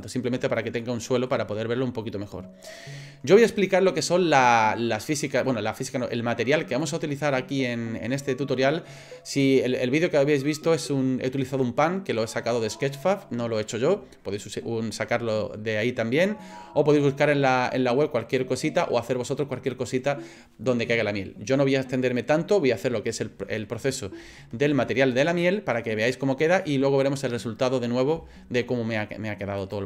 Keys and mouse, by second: 0.8 middle click, 24.3 shift+middle click, 29.6 click.